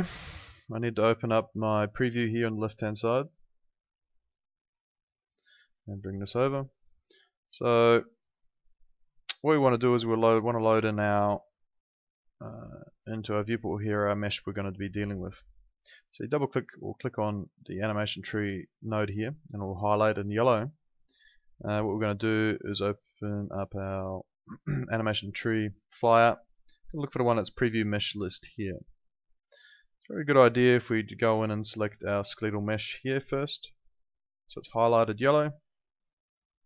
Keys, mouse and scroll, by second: 12.5 click, 21.9 click, 30.3 click.